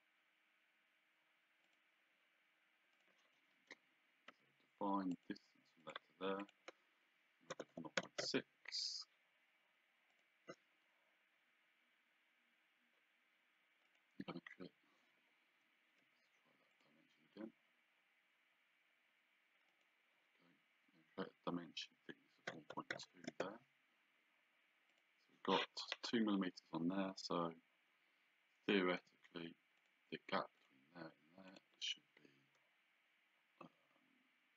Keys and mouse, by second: 1.6 click, 2.9 click, 3.6 Escape, 4.3 d, 5.1 click, 7.5 KP_0, 7.7 KP_Decimal, 8.2 Return, 8.2 KP_Enter, 10.1 click, 13.9 click, 15.2 Escape, 15.2 `, 16.0 d, 16.7 click, 19.7 click, 22.5 KP_1, 22.7 KP_Decimal, 23.3 Return, 23.3 KP_Enter, 24.9 click, 25.8 Escape, 29.0 d, 29.8 click.